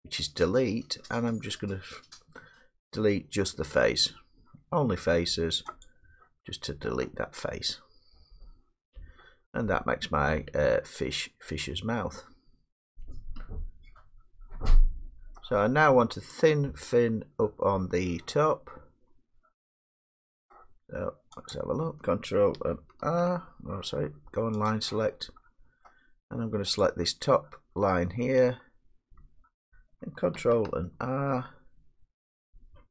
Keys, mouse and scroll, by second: 2.5 middle click, 5.9-11.1 drag, 15.3-17.2 middle drag, 17.3 middle click, 17.5 middle click, 17.7-20.7 middle drag, 21.5 click, 24.7 click, 26.1 middle click, 26.8 click, 29.8 middle click, 31.0 ctrl+r.